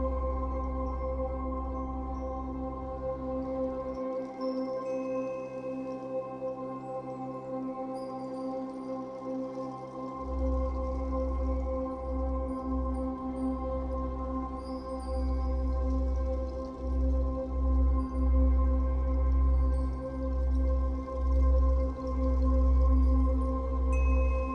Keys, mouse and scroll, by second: 0.4-1.7 drag, 1.5 scroll down 2, 1.7-7.0 middle drag, 3.9 scroll up 2, 7.0-8.5 drag, 8.5-10.4 middle drag, 10.4-11.9 drag, 11.9-13.5 middle drag, 12.5 scroll up 2, 13.5-16.1 drag, 15.8 f, 16.2-18.9 shift+drag, 18.4-18.9 scroll down 2, 18.9-24.5 middle drag, 20.9 scroll up 2, 22.7-23.2 scroll up 4.